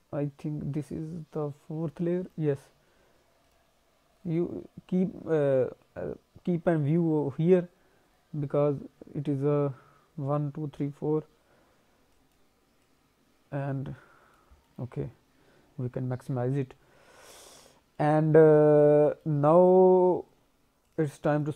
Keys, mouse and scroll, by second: 2.2 click, 3.4 click, 12.0 click, 12.8 click, 14.5 scroll down 1, 14.6 middle click, 15.1 scroll up 1, 15.6 scroll down 2, 16.7-17.4 scroll down 1, 17.4 middle click, 17.9 alt+middle click, 19.0 middle click, 19.4-20.1 scroll up 1, 20.8 click, 21.3 click.